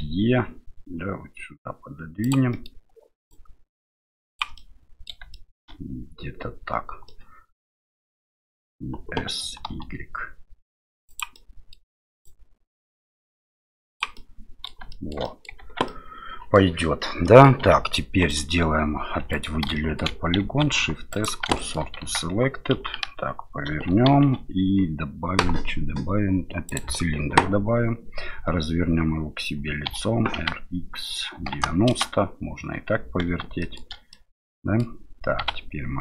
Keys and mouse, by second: 2.6 middle click, 3.4-4.4 drag, 4.7 middle click, 5.3 shift+middle click, 7.2-8.3 middle drag, 9.4 s, 11.5 middle click, 12.4-14.0 drag, 14.3 middle click, 15.0 shift+middle click, 15.4 middle click, 15.6 Tab, 15.9 middle click, 17.2 click, 17.6 Tab, 18.3 right click, 19.2 3, 19.3 right click, 19.7 shift+middle click, 20.4 shift+s, 21.6 shift+middle click, 22.0 Tab, 22.7 KP_1, 24.1 shift+a, 29.9 r, 33.7 shift+middle click, 34.3-35.4 middle drag, 35.4 s.